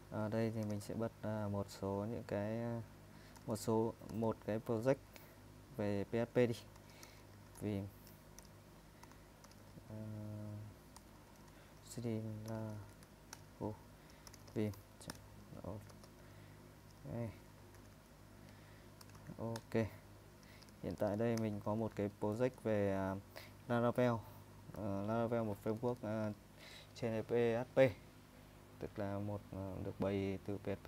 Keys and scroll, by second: 0.3-1.3 typing, 3.4-4.1 typing, 6.4-16.4 typing, 17.8 ctrl+w, 17.9 ctrl+w, 18.8-22.1 typing, 22.6 super+Tab, 25.7-27.3 typing.